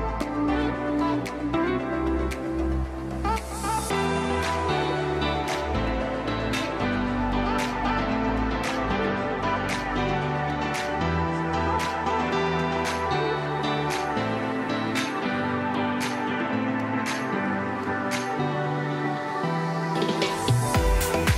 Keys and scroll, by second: 4.6 shift+Page_Up, 4.9 shift+F2, 5.1 F3, 5.9 Escape, 13.4 alt+c, 16.1 ctrl+Page_Down, 17.0 shift+Page_Down, 17.4 ctrl+Page_Up, 19.6 shift+Page_Up, 20.1 ctrl+Page_Down.